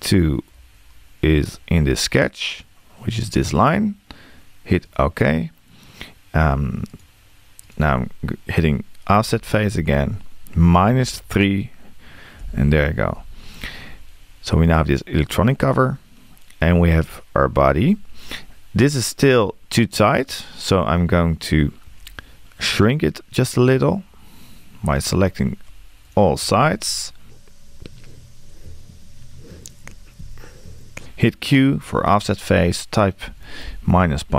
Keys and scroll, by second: 9.3 q.